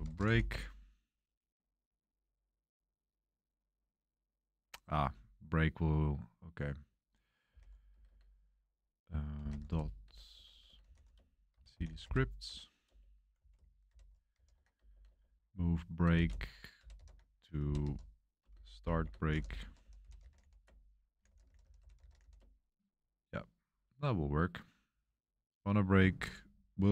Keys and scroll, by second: 0.0-0.7 typing, 7.2-8.0 typing, 9.2-22.6 typing.